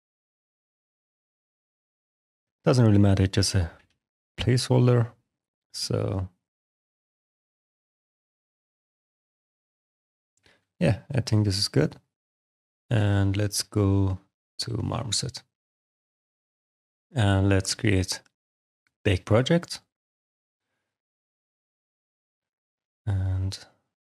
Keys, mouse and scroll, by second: 3.6 e, 3.7 y, 4.6 click, 5.3 click, 9.2 click, 10.3 alt+click, 11.8 click, 12.6 shift+f, 12.7 click, 12.8 shift+f, 15.9 click, 16.6 click, 17.5 click.